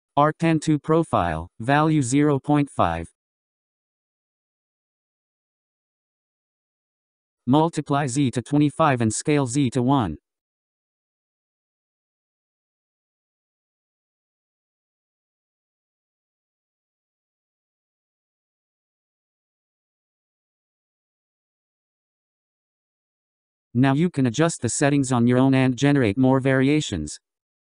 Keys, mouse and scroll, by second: 0.8-9.8 drag, 11.1-13.2 scroll down 8, 13.2-14.1 scroll up 6, 14.1-15.1 scroll down 6, 15.1-16.9 scroll up 16, 16.9-20.0 drag, 23.4-24.2 scroll down 3, 24.2-27.7 scroll down 8.